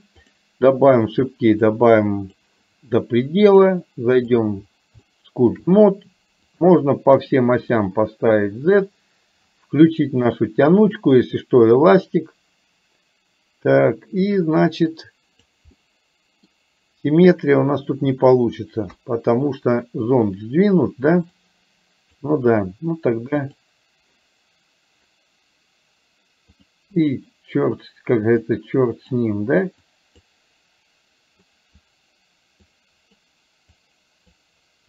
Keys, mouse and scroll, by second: 1.8 click, 3.7-4.7 drag, 5.1 shift+middle click, 6.6 click, 7.3 click, 14.2-15.4 drag, 15.8 middle click, 19.1 KP_1, 21.4 click, 23.4 click, 27.1 click, 28.6 click, 29.9 click, 31.6 click, 32.7 click, 33.8 click.